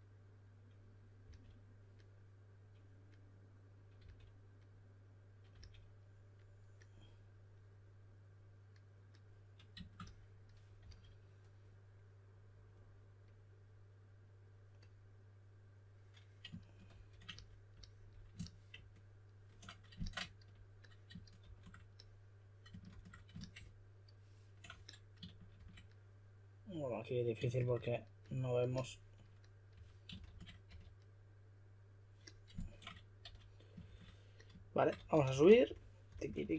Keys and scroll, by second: 1.2 typing, 4.0 typing, 5.5 typing, 10.8 s, 16.9 shift+f, 21.4 shift+f, 22.9 shift+f, 25.5 shift+f, 27.5 shift+f, 29.5-31.2 typing, 33.8 shift+f, 34.9-36.5 typing.